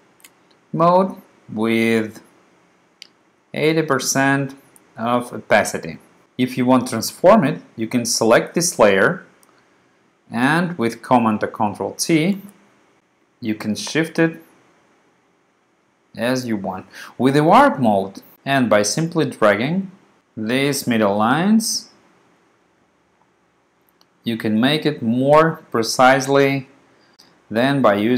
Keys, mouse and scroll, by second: 2.1 click, 3.3 click, 3.6 click, 4.2 click, 4.5 click, 12.4 super+t, 13.3 click, 13.7 click, 18.3 click, 18.7 click, 19.6 click, 20.4 click, 21.2 click, 21.7 click, 22.5 click, 23.0 click, 23.7 click, 26.8 click, 27.1 click, 27.7 click.